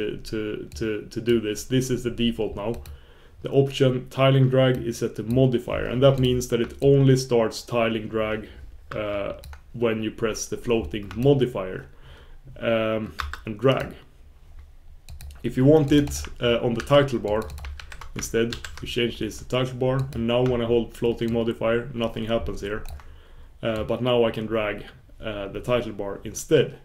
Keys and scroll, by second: 7.5 super+s, 11.7 super+s, 12.5 super+s, 24.8 super+s, 25.2 super+s, 25.9 super+s, 26.2 super+s, 26.6 super+s.